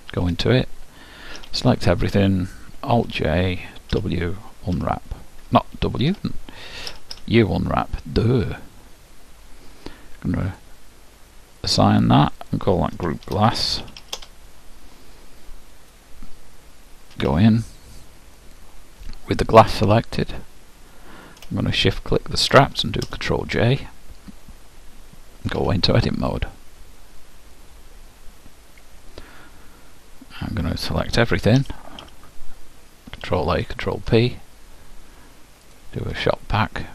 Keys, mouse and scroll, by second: 0.3 Tab, 1.4 a, 3.0 alt+j, 4.0 w, 6.9 u, 7.2 u, 10.5-14.4 drag, 14.0 s, 17.2 Tab, 19.6-23.5 drag, 23.1 ctrl+j, 25.5 Tab, 31.6 a, 32.1 a, 33.4 ctrl+a, 33.6 ctrl+p, 35.7-36.9 drag.